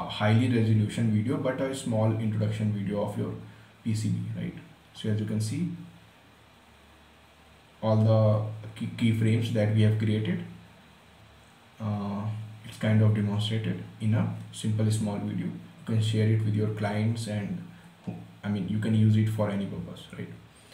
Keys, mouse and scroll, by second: 20.4 click.